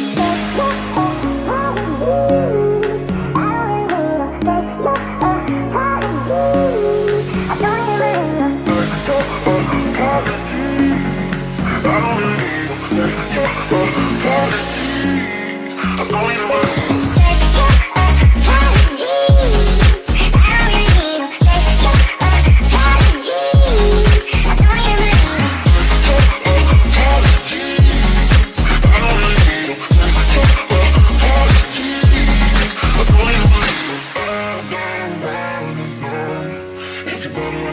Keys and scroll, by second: 0.8-4.1 typing, 5.2 e, 6.4 ctrl+s, 28.7 ctrl+s, 33.8 Return, 34.1 ctrl+v.